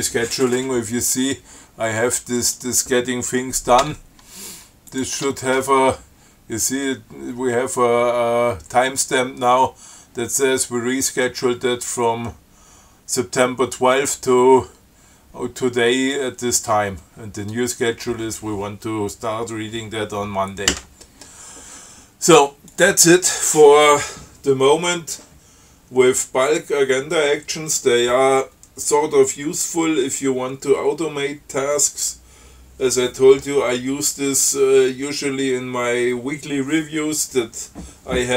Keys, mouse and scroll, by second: 1.5-1.8 scroll up 2, 2.7 click, 4.1 Tab, 5.1 click, 5.4 Tab, 23.0 click.